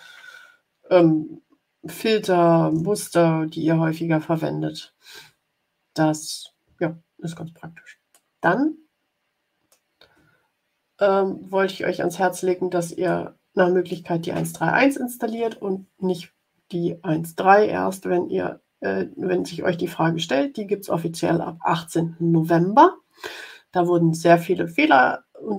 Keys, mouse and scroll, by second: 6.8 ctrl+scroll down 2, 8.2-9.8 drag, 10.4-11.2 ctrl+scroll up 4, 11.9 ctrl+scroll up 2, 13.0 middle click, 13.4 click.